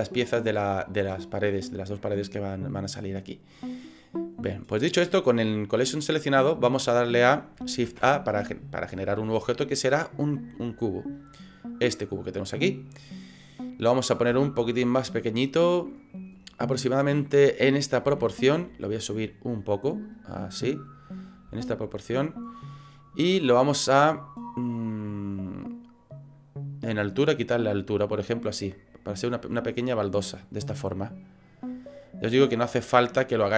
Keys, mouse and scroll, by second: 5.8 click, 7.9 shift+a, 14.3 s, 16.0-16.4 scroll up 4, 16.6 middle click, 18.1 s, 19.2 click, 20.2 click, 21.5 s, 23.0 click, 23.3-24.0 scroll up 5, 23.8 middle click, 24.2 middle click, 25.4 click, 30.9 middle click, 31.4 middle click, 31.7 middle click, 32.7-33.1 scroll down 6, 33.3 middle click.